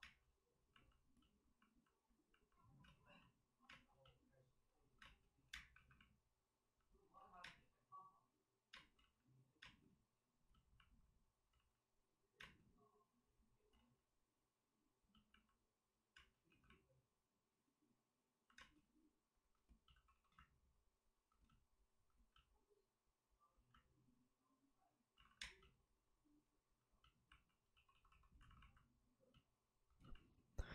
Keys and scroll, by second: 0.0 space, 2.8 space, 3.6 space, 5.0 space, 5.4 1, 5.7 1, 7.3 ctrl+z, 7.4 space, 8.9 ctrl+z, 8.9 space, 9.6 space, 11.5 ctrl+z, 12.3 space, 13.7 ctrl+z, 15.4 ctrl+z, 16.1 space, 16.4 2, 18.5 space, 19.9 shift+d, 20.0 shift+d, 25.1 alt+s, 25.4 space, 27.7 space, 27.7 d, 27.9 d, 28.0 d, 28.3 alt+s.